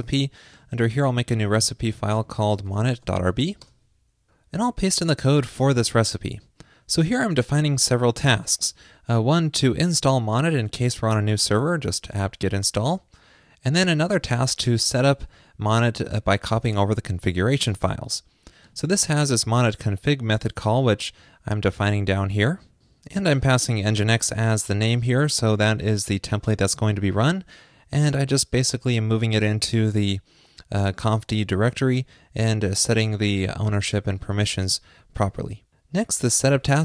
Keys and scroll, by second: 2.2 super+a, 5.1 super+v.